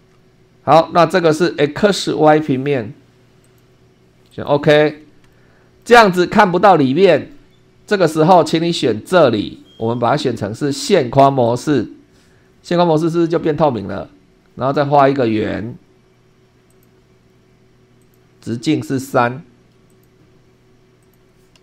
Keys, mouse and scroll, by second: 0.0 super+2, 0.9-1.4 scroll up 2, 3.4 click, 4.3 click, 5.3 shift+middle click, 9.0 click, 11.4 click, 16.7 click, 18.0 click, 18.5 click, 19.1 Escape, 19.9 click, 21.0 click.